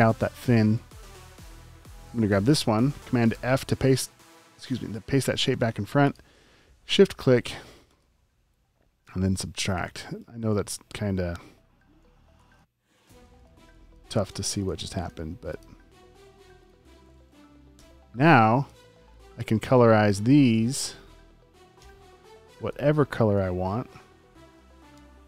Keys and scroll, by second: 3.3 super+f, 9.2 space, 9.7 space, 10.0 space, 11.4 space, 12.3 space, 12.8 alt+super+space, 14.2 v, 14.8 space, 15.8 space, 16.2 v, 17.7 BackSpace, 18.3 space, 18.8 a, 21.8 i, 23.4 super+z, 24.9-25.2 typing.